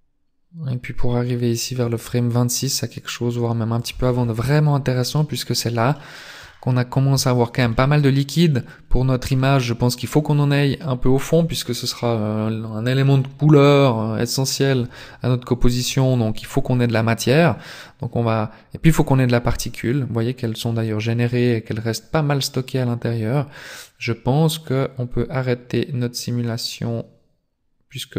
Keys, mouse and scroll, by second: 4.4 scroll up 4, 5.4 middle click, 6.4 scroll up 2, 6.7 middle click, 7.5 shift+middle click, 8.1 middle click, 9.9 scroll up 1, 16.4 click.